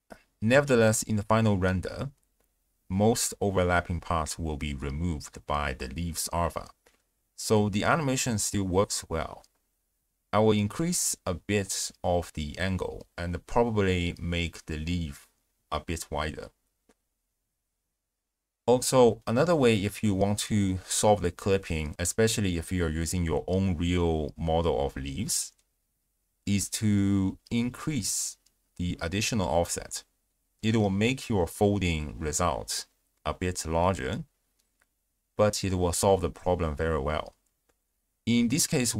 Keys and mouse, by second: 0.8 click, 1.3 shift+click, 1.8-3.3 drag, 6.9 z, 9.0 z, 10.9 space, 11.8 space, 11.9-12.2 drag, 12.5 click, 13.7-14.3 drag, 14.4 shift+click, 14.8 click, 15.4 click, 15.8 shift+space, 16.4 click, 16.7 space, 16.9 click, 17.5 click, 17.6 Tab, 17.7 a, 17.8 s, 17.9 x, 18.4 click, 18.5 Tab, 19.5 shift+space, 20.1 space, 20.8 ctrl+alt+shift+q, 21.3 z, 21.8 shift+space, 22.3 click, 22.8 click, 25.4 click, 26.1-28.1 drag, 28.7-29.3 drag, 29.6 z, 31.3 space, 32.6 space, 34.0 shift+space, 34.6 z, 38.6 w.